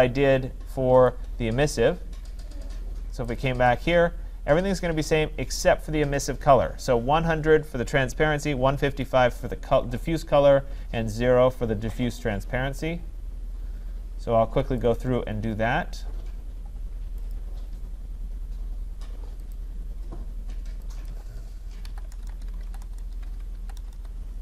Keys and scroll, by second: 22.5 Tab.